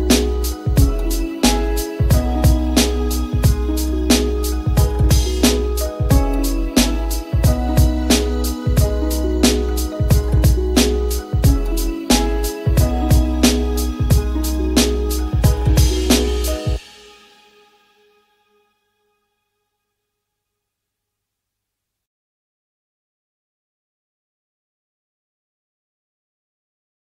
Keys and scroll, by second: 0.5 space, 6.4 e.